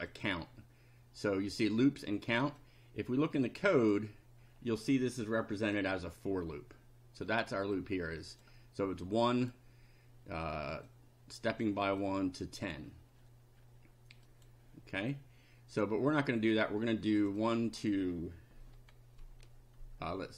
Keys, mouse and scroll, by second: 0.1 click, 2.6-4.1 drag, 5.7 click, 7.8 click, 9.2 click, 10.9 click, 12.0 click, 14.2 click, 17.2 click.